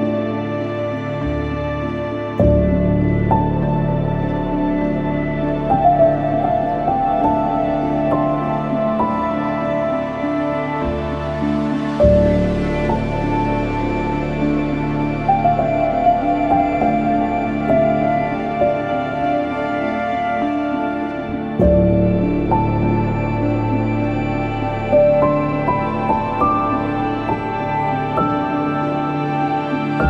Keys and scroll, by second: 0.3-1.3 typing, 3.7 /, 13.0 ctrl+shift+p, 23.6 ctrl+q.